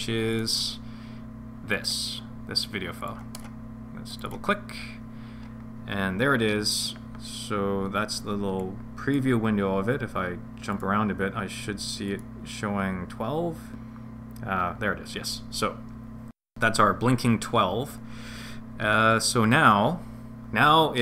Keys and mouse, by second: 8.6 click, 10.7 click, 12.1 click.